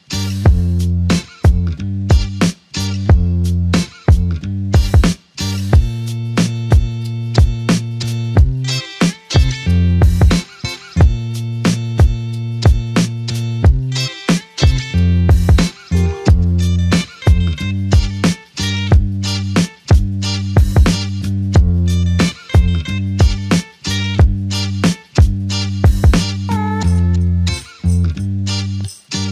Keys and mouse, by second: 0.5 ctrl+shift+click, 2.3 shift+click, 2.8 alt+shift+click, 5.7 alt+click, 6.6 ctrl+click, 7.5 ctrl+click, 10.8 ctrl+click, 10.8 shift+click, 16.1 double click, 17.2 alt+click, 19.0 alt+shift+click, 19.7 alt+click, 21.7 f, 22.7 alt+click, 24.5 double click, 24.9 alt+click, 28.7 alt+click.